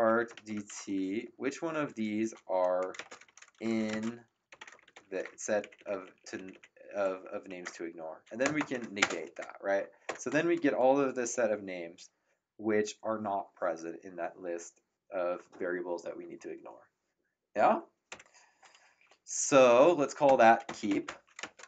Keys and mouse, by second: 0.0-5.5 typing, 5.6 ctrl+Left, 8.5 shift+1, 9.0 space, 10.0 ctrl+Return, 18.1 Up, 20.2-21.6 typing.